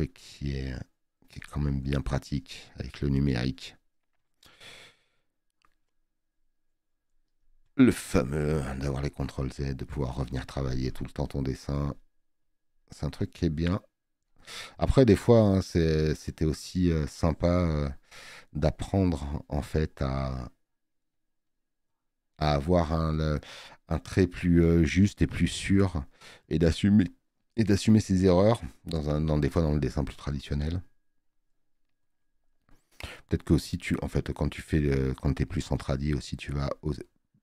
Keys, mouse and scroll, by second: 17.2 space, 17.3 click, 28.9 click, 28.9 space.